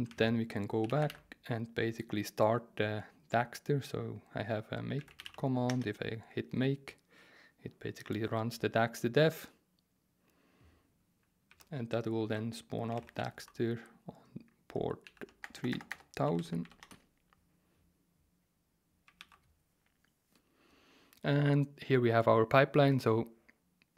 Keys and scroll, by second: 0.1 alt+1, 0.3 alt+1, 0.6-1.5 typing, 4.7-5.7 typing, 11.5 alt+2, 12.2 super+t, 12.6-17.1 typing, 15.0 End, 19.2 super+r.